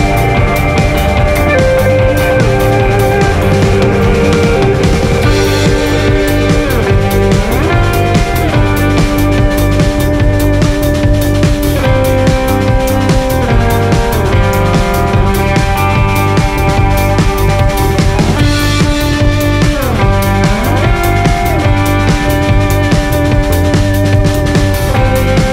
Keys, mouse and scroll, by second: 4.2 KP_0, 6.2 click, 9.2 alt+a, 9.3-10.9 scroll up 2, 10.9 scroll up 1, 11.2 click, 12.5 scroll up 1, 13.7 scroll down 1, 20.3-21.9 drag, 22.3 click, 23.3 click, 23.7 KP_Divide, 23.8 KP_0.